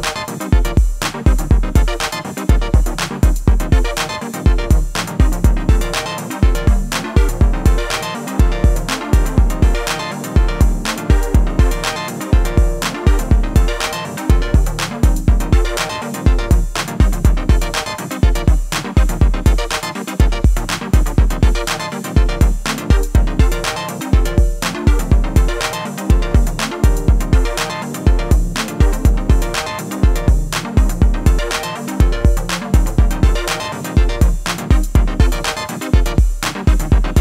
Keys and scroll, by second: 22.1-22.6 typing, 23.3 Return.